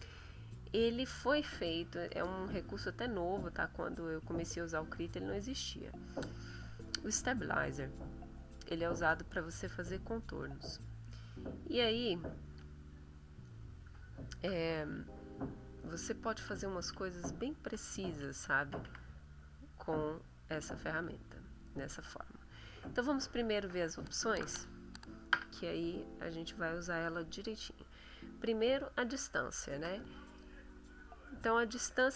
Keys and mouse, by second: 1.7-2.4 drag, 3.0 middle click, 10.4 click, 13.2 middle click, 15.1-16.5 ctrl+middle drag, 16.8 ctrl+middle click, 17.2-18.3 ctrl+middle drag, 20.1 ctrl+shift+click.